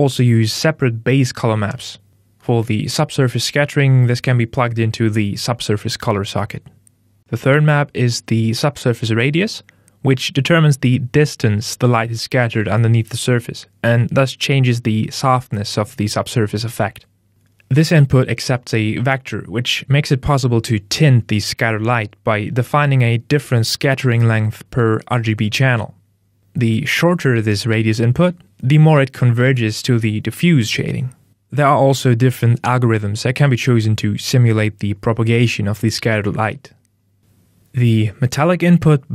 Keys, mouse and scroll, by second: 10.7 click, 14.3 Tab, 37.2 click.